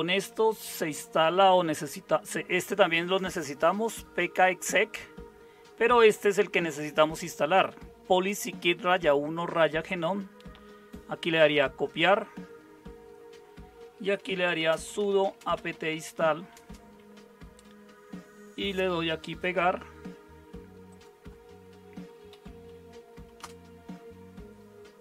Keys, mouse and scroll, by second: 13.9-16.9 typing, 22.3 Right, 23.4 Return.